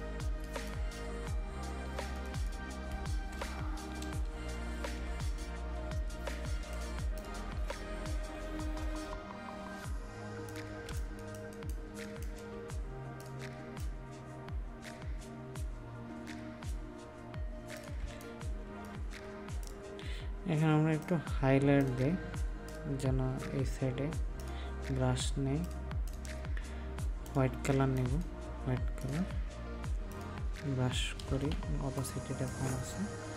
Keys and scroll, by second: 18.0 ctrl+space, 31.2 ctrl+z.